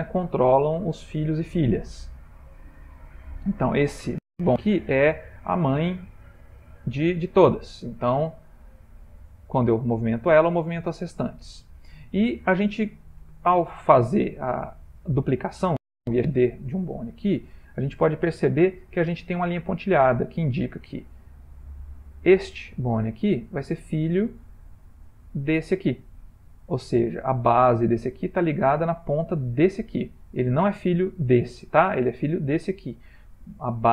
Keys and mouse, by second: 2.3 ctrl+middle click, 2.5 ctrl+middle click, 3.5 click, 7.8 r, 12.8 ctrl+middle click, 14.4 Tab, 15.0 click, 18.1 ctrl+middle click, 21.0 click, 21.7 g, 29.6 click, 31.2 click, 32.5 click.